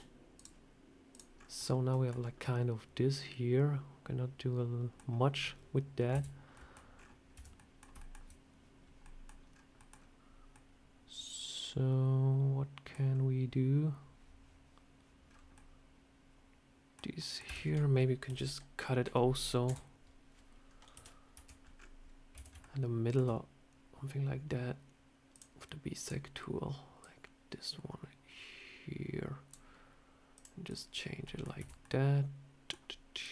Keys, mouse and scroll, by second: 0.2 click, 1.0 click, 1.2 scroll up 4, 1.4 middle click, 1.9 scroll down 4, 2.3 middle click, 2.3 scroll up 1, 4.9 scroll down 1, 6.0 /, 6.4 middle click, 6.8 scroll up 5, 7.2 Tab, 7.4 middle click, 7.8 shift+middle click, 8.9 middle click, 9.4 scroll down 3, 9.6 scroll up 1, 9.6 middle click, 10.4 middle click, 10.4 shift+middle click, 13.0 scroll up 2, 15.1 scroll down 3, 15.4 middle click, 17.0 middle click, 17.3 Tab, 18.1 KP_7, 19.5 /, 20.8 KP_7, 21.2 Tab, 21.5 scroll down 1, 21.6 scroll up 4, 22.2 a, 22.5 shift+middle click, 25.2 click, 30.2 click, 30.5 click, 30.8 scroll down 2, 31.1 middle click, 31.4 Tab, 31.7 middle click, 33.1 click.